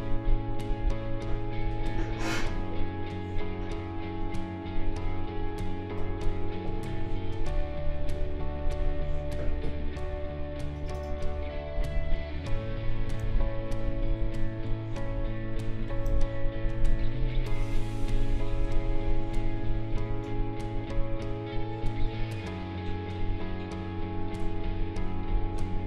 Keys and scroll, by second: 13.2 ctrl+z, 16.1 ctrl+z.